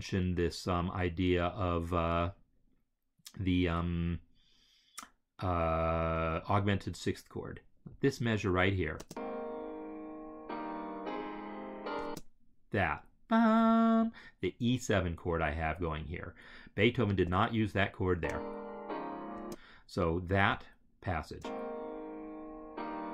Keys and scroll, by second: 8.9 space, 11.9 space, 18.0 space, 21.2 space.